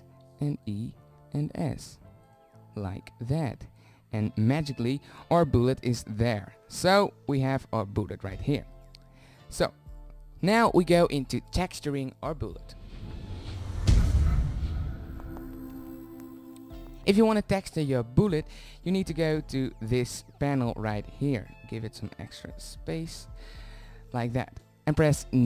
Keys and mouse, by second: 1.1 e, 1.9 s, 7.0 Tab, 10.1 middle click, 10.4 drag, 18.8-19.5 drag, 19.5-22.0 middle drag, 22.0-25.4 drag.